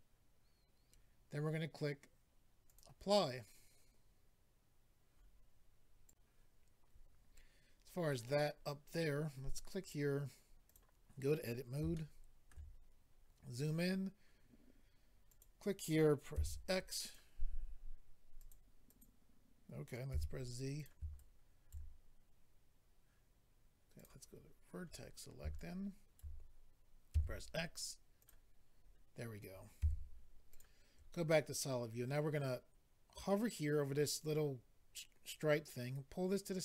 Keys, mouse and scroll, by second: 2.6 click, 2.7 click, 7.3 click, 8.1 click, 8.2 click, 9.8 click, 9.9 click, 10.6 click, 10.7 click, 11.9 shift+middle click, 12.7-13.7 scroll up 4, 15.3 click, 15.4 click, 16.3 x, 17.0 click, 18.4 click, 18.5 click, 18.8 click, 19.0 double click, 20.1 z, 20.7 click, 20.8 click, 21.1 ctrl+right click, 23.9 click, 24.0 click, 24.4-24.9 scroll down 1, 24.9-25.2 scroll down 2, 25.4 scroll down 2, 25.5 ctrl+right click, 27.1 x, 28.2 click, 28.8-29.5 scroll up 1, 29.8 scroll up 1, 29.8 z, 30.5 click, 35.5 click.